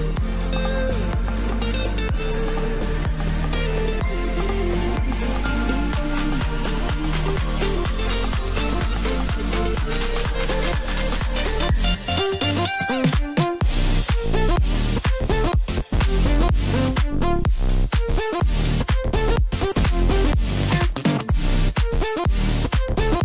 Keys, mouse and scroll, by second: 1.4-4.4 drag, 5.4-7.7 middle drag, 7.7-8.1 scroll up 3, 8.2-10.7 middle drag, 10.7-11.2 scroll down 6, 11.2-12.1 middle drag, 12.1 scroll up 2, 12.7-13.1 scroll up 1, 13.1-16.2 middle drag, 19.3 shift+click, 20.8 ctrl+j, 21.8-22.2 scroll up 3, 22.2-22.6 scroll down 4, 22.6-23.2 middle drag.